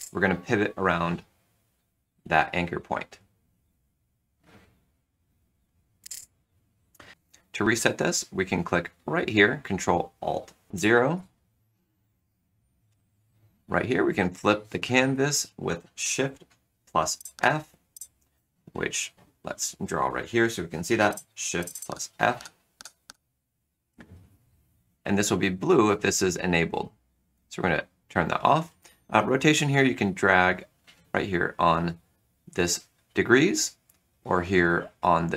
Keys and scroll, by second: 1.7 r, 4.3 r, 17.3 shift+f, 21.8 shift+f, 22.7 shift+f, 23.0 shift+f.